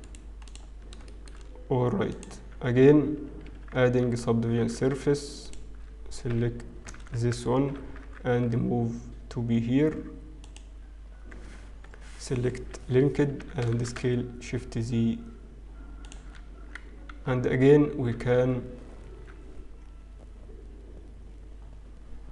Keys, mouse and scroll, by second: 0.7 right click, 1.0 shift+middle click, 1.4-2.6 scroll up 5, 2.6 click, 4.5 ctrl+2, 4.5 scroll up 1, 5.1 Tab, 5.4 alt+click, 6.3 f, 6.9 ctrl+z, 8.1 g, 12.9 ctrl+l, 13.3 s, 16.9-17.8 scroll down 4, 17.8 Tab, 17.8-19.5 scroll up 2, 19.5 Tab.